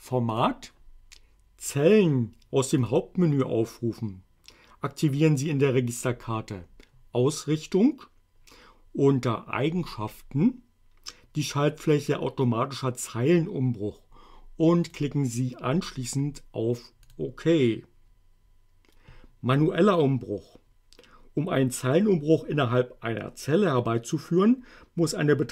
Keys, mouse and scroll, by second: 0.4 click, 2.9 click, 15.0 click, 17.1 click.